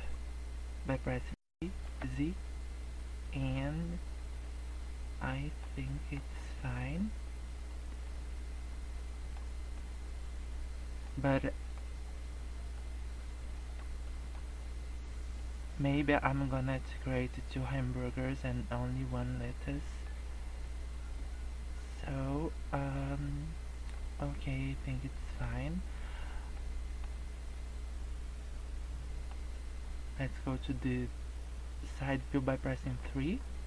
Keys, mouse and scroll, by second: 1.2 g, 3.7 scroll down 4, 3.9-4.3 scroll up 3, 4.4 middle click, 5.8 middle click, 6.2 scroll down 3, 6.4 middle click, 6.8 scroll up 1, 7.3 scroll down 2, 7.5 scroll up 2, 8.0 middle click, 9.8 middle click, 11.4 middle click, 12.4 scroll up 1, 12.7 middle click, 14.0 middle click, 14.4 scroll down 3, 14.6 middle click, 17.0 middle click, 19.2 middle click, 19.8 middle click, 20.2 scroll up 1, 20.6 middle click, 23.0 middle click, 24.3 middle click, 25.6 scroll down 2, 25.6 middle click, 26.1 scroll up 2, 26.6 middle click, 27.2 scroll up 1, 27.7-28.4 scroll down 2, 28.4 scroll up 1, 29.0 middle click, 32.9 KP_3.